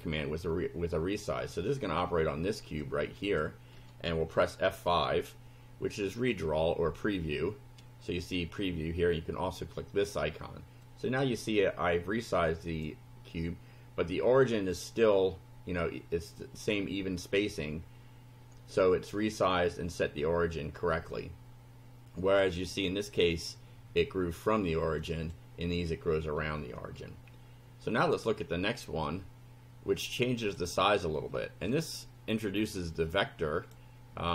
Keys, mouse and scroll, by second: 0.0 2, 2.9 click, 4.9 F5, 10.9 click, 11.5-13.0 drag, 21.0-22.5 drag, 25.1 click, 27.0-28.3 shift+right drag, 30.4 click, 32.7-33.9 drag.